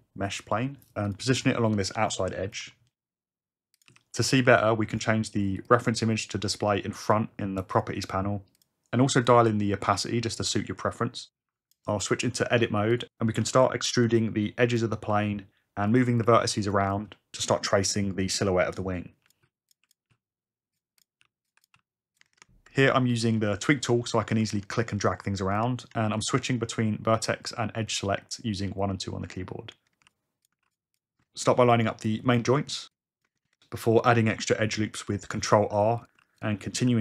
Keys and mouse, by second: 2.0 s, 2.7 g, 3.9 s, 4.3 click, 4.5 g, 5.0 click, 5.7 click, 7.8 click, 8.6 click, 9.3-11.8 drag, 13.4 Tab, 15.1 g, 15.9 click, 16.7-18.0 typing, 16.9 click, 18.7 click, 19.2-21.7 typing, 19.3 click, 19.9 click, 21.0 click, 21.5 click, 25.0 shift+click, 25.4 click, 26.9 click, 28.2 click, 30.0 ctrl+r, 30.1 click, 30.6 ctrl+r, 31.6 click, 35.0 click, 35.4 ctrl+r, 35.7 ctrl+r, 36.0 click, 36.2 ctrl+r, 36.3 click, 36.7 click.